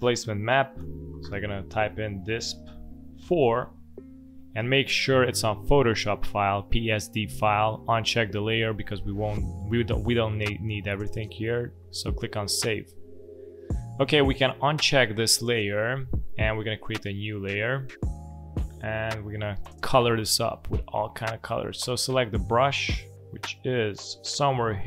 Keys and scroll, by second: 0.7 shift+d, 1.2 s, 2.6 p, 3.1 4, 21.5 space.